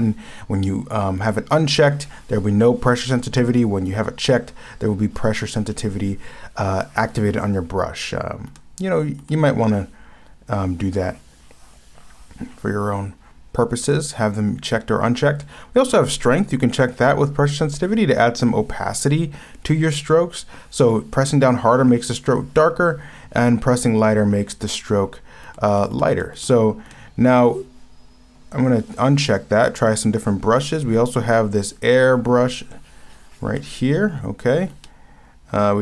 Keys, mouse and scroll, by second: 1.3 ctrl+z, 3.6 ctrl+z, 8.5 ctrl+z, 9.2 ctrl+z, 25.5 ctrl+z, 25.7 ctrl+z, 25.9 ctrl+z, 26.1 ctrl+z, 26.3 ctrl+z, 34.8 ctrl+z.